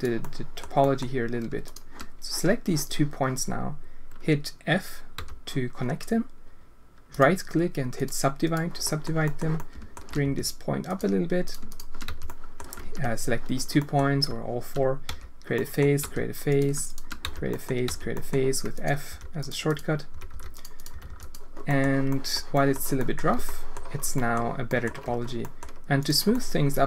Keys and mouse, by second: 0.3 click, 0.9 click, 5.1 f, 7.1 right click, 8.8 click, 9.3 click, 9.5 alt+shift+click, 10.2 g, 11.4 click, 11.7 shift+click, 12.0 f, 12.2 click, 12.8 ctrl+z, 13.7 click, 15.0 f, 15.5 click, 16.0 f, 16.4 click, 16.8 shift+click, 17.2 f, 17.5 click, 17.8 f, 18.1 click, 19.0 g, 20.1 g, 20.9 g, 21.7 click, 22.2 click, 22.6 click, 23.1 click, 23.3 Tab, 23.4 click, 24.1 click, 24.6 click, 25.0 Tab, 25.4 click, 26.3 click.